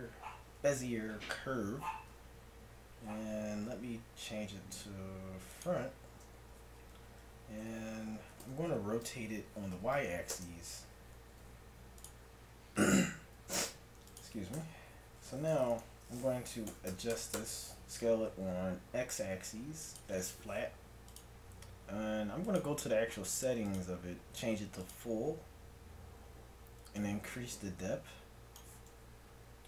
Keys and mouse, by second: 3.6 F6, 6.9 z, 8.5 r, 11.3 g, 13.4 g, 14.6 Tab, 16.7 s, 18.4 g, 21.1-25.3 drag, 28.9 middle click.